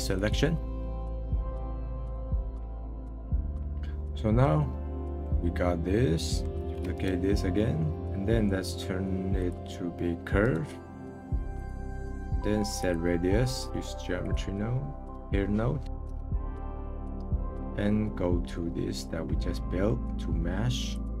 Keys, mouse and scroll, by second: 0.8-1.4 scroll down 6, 1.0 click, 2.1 click, 2.6-3.3 middle drag, 3.3-3.8 scroll down 3, 3.8-6.5 middle drag, 6.5 click, 6.6 shift+d, 7.9 click, 10.4-12.0 right drag, 12.0 middle click, 12.8-14.4 drag, 15.1 click, 19.2-19.7 scroll down 11, 19.7-20.9 middle drag, 20.9 click.